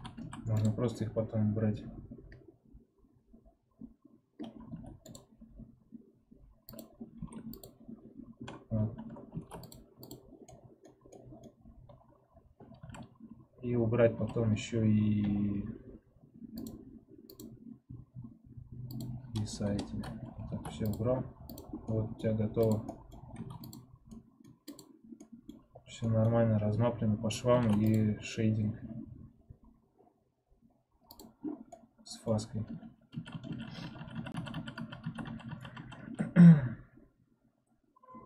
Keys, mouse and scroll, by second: 0.1 a, 4.6 2, 6.7-7.7 right drag, 7.7 ctrl+Tab, 9.6 ctrl+Tab, 10.0 click, 10.4-12.7 middle drag, 12.7 a, 14.1 a, 15.1 n, 19.6-21.1 drag, 21.1 ctrl+Tab, 21.7 click, 21.8-23.6 middle drag, 23.6 ctrl+Tab, 24.0 middle click, 24.7 click, 25.1 middle click, 25.6-26.0 scroll down 1, 26.0 middle click, 26.3-26.9 scroll up 2, 26.9-28.0 scroll down 1, 28.0 ctrl+Tab, 31.0 click, 31.6-34.6 middle drag, 34.6 ctrl+z.